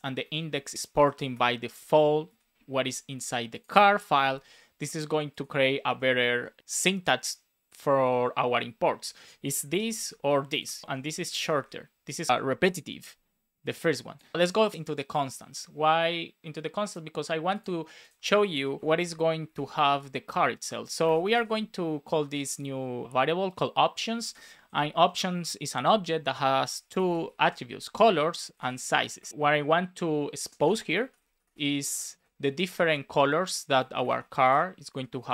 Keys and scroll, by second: 0.6 shift+super+Left, 0.9 BackSpace, 2.2 super+s, 5.8 super+z, 9.6 super+c, 9.9 super+z, 10.8 shift+super+Left, 11.0 super+c, 11.1 Right, 11.4 Return, 11.5 super+v, 12.3 alt+shift+Right, 12.5 BackSpace, 18.8 Return, 18.9 space, 19.8 space, 21.4 space, 24.2 space, 24.5 shift+[, 24.9 Return, 27.3 shift+i, 27.4 space, 28.0 Return, 29.1 BackSpace, 29.3 space, 30.5 shift+\, 30.7 space, 31.8 Right, 32.1 space, 32.5 shift+1, 32.6 space, 34.8 Right.